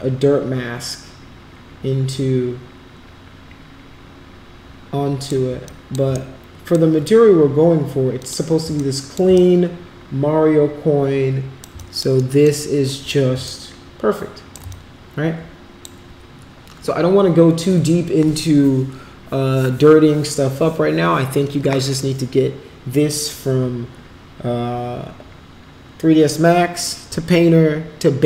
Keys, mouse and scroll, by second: 2.1-5.3 drag, 5.7 alt+click, 6.2 shift+right click, 8.2 click, 8.8 alt+click, 9.4-11.7 shift+right drag, 11.8 alt+click, 12.2 alt+middle click, 12.9 alt+middle click, 13.5-14.6 shift+right drag, 14.7-15.9 alt+drag.